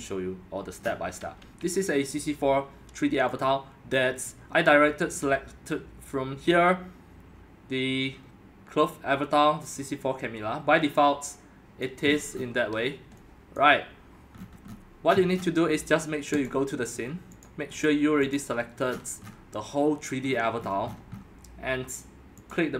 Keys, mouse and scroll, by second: 0.8-1.2 scroll, 1.2-3.1 scroll down 10, 3.1-3.4 scroll up 10, 3.4-5.9 drag, 6.1-8.4 drag, 11.8 click, 12.1-13.5 scroll, 13.6-14.3 drag, 14.6-16.5 scroll down 31, 16.5 click, 17.9 click, 18.9-20.3 scroll, 20.3-20.8 scroll, 20.8-21.4 scroll down 19, 22.5 click.